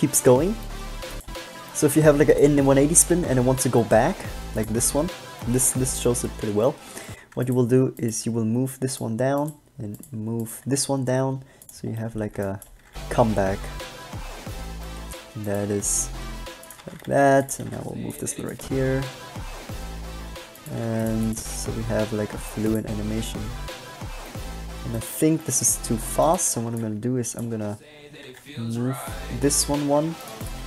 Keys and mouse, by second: 7.3 alt+a, 8.3 g, 10.7 g, 12.3 middle click, 12.8 click, 13.0 alt+a, 15.8 g, 17.0 shift+d, 17.8 g, 21.0 g, 27.0 b, 27.2 click, 28.4 g.